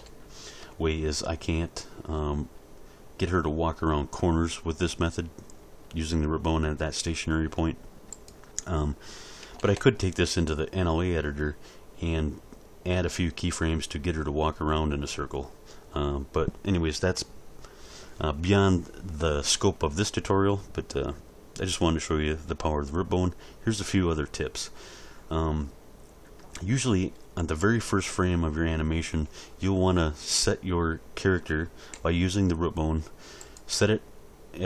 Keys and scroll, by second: 0.6 z, 9.6 alt+a, 31.9 g.